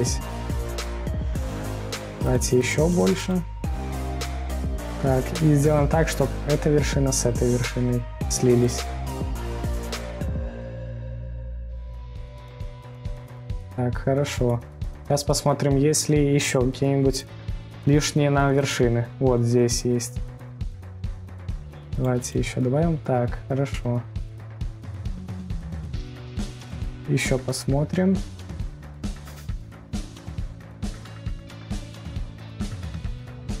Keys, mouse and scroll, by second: 4.1 scroll down 2, 7.3 scroll down 1, 9.3-14.2 drag, 14.1 scroll, 14.2-14.8 scroll down 4, 14.8-15.7 middle drag, 15.7-16.9 scroll up 3, 16.9-17.5 scroll down 4, 17.5-18.2 middle drag, 18.2-18.5 scroll down 3, 18.5-20.5 scroll up 3, 21.2-23.4 drag, 23.3-24.7 scroll down 3, 24.7 click, 25.6 middle click, 26.2 scroll, 26.2-26.5 scroll down 2, 26.5 scroll up 2, 26.8-27.5 middle drag, 27.5-28.1 scroll down 3, 28.1-28.6 scroll up 2, 28.6-29.5 middle drag, 29.5-29.9 scroll down 2, 29.9 scroll up 2, 30.5 scroll up 1, 30.5-31.0 scroll down 2, 30.9-32.8 middle drag, 32.8-33.2 scroll down 4, 33.1-33.6 scroll up 6.